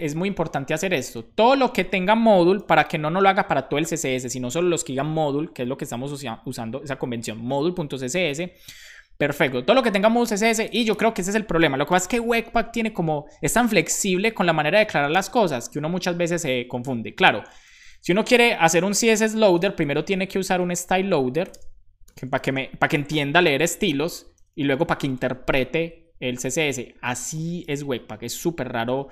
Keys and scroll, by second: 0.0-1.7 typing, 3.8 super+s, 11.7-12.4 typing, 13.7 shift+;, 13.8 shift+space, 14.7 BackSpace, 16.3 Return, 16.8 Up, 17.8 super+Left, 18.1 Right, 18.8 Left, 19.0 Left, 19.2 Left, 20.2 Right, 20.6 Left, 22.6-23.6 typing, 28.9 Return.